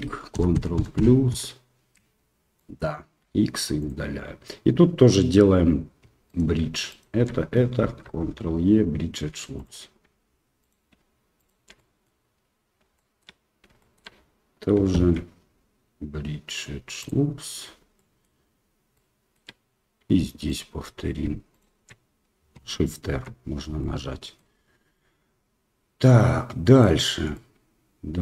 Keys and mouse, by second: 0.3 ctrl+KP_Add, 0.5 ctrl+KP_Add, 0.7 ctrl+KP_Add, 0.9 ctrl+KP_Add, 1.3 ctrl+KP_Add, 2.5 middle click, 3.2 x, 5.0 middle click, 6.2 alt+right click, 6.9 alt+shift+right click, 7.8 ctrl+e, 10.6 alt+right click, 11.3 alt+shift+right click, 11.7 middle click, 12.9 shift+middle click, 13.8 shift+middle click, 15.0 ctrl+e, 17.4 middle click, 18.0 shift+middle click, 18.9 shift+middle click, 20.4 alt+middle click, 21.5 alt+shift+right click, 23.1 shift+r, 23.8 middle click, 24.9-26.8 middle drag, 27.3-28.2 middle drag.